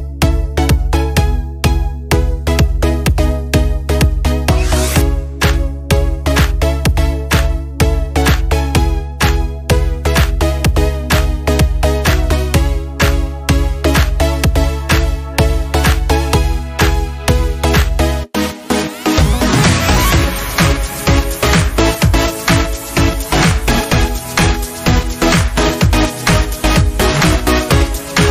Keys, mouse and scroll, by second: 9.1 click.